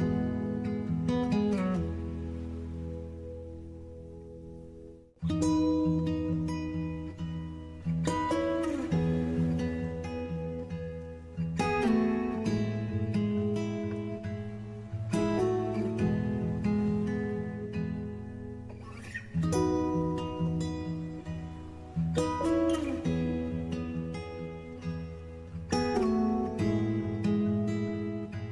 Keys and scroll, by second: 5.9-8.2 typing.